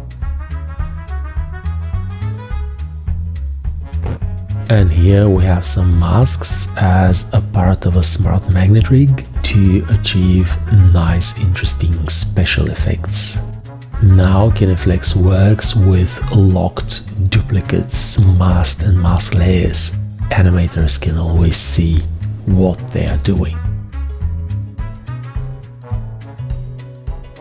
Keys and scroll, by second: 0.2 Return, 12.5 shift+F3, 15.3 shift+F3, 16.0 g, 18.0 shift+F3, 18.3 `, 23.8 shift+F3, 24.6 shift+F3, 25.1 g.